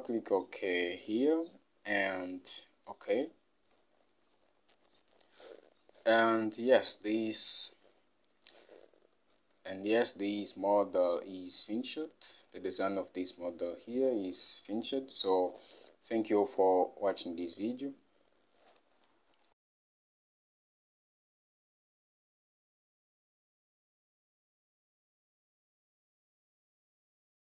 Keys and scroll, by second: 5.8 Home, 14.8 Home, 19.8 F8.